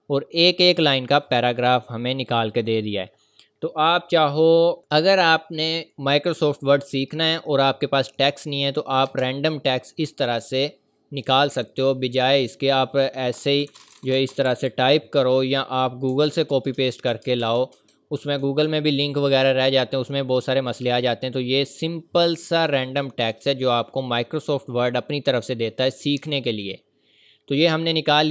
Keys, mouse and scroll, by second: 0.4 click, 7.3 click, 7.3 scroll down 1, 7.7 scroll up 1, 8.2 click, 9.1 BackSpace, 9.5 scroll up 1, 13.3 scroll up 1, 13.3-14.5 typing, 20.0 click, 27.5 click.